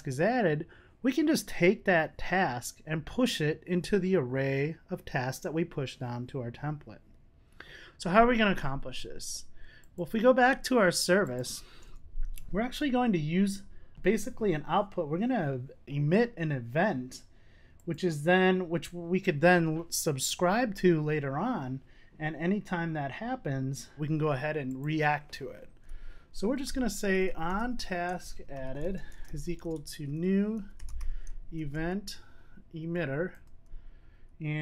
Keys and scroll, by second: 33.4 Return.